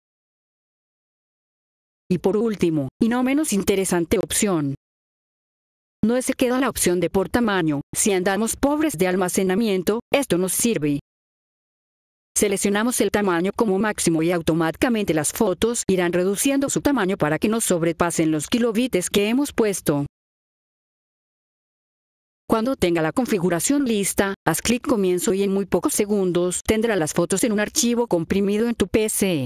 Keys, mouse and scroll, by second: 0.0-0.8 typing, 1.4 F4, 2.0 click, 7.8 click, 10.0-18.6 drag, 22.0 F4, 22.4 click, 27.0 click.